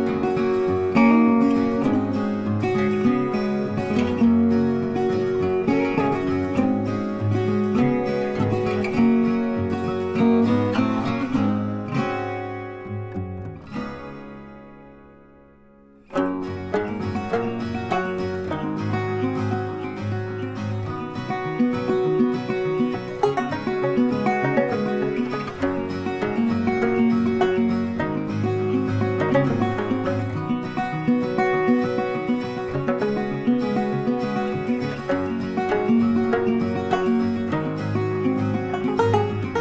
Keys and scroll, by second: 1.8 shift+c, 12.8 ctrl+z, 18.9 ctrl+z, 20.1 space, 25.2 ctrl+a, 27.2-29.1 typing, 30.8-36.5 typing, 33.2 Return, 37.5 ctrl+a, 38.8 F3, 39.3 u, 39.5 Return.